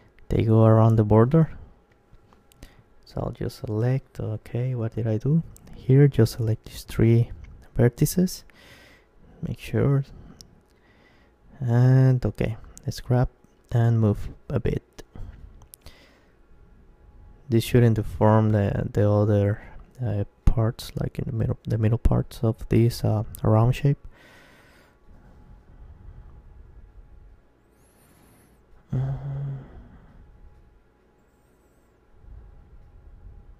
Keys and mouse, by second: 2.5 ctrl+KP_1, 4.1-8.2 middle drag, 5.3-7.6 drag, 6.7-7.7 right drag, 8.2 ctrl+KP_1, 8.9 KP_Decimal, 9.7-13.3 middle drag, 12.7 g, 14.4-18.2 drag, 17.0-20.8 right drag, 19.8 g, 22.1-24.0 drag, 24.0 middle click, 24.7-28.7 right drag, 28.1 g, 29.4-31.1 drag, 30.1-32.3 middle drag, 31.6-33.5 right drag, 33.2 g.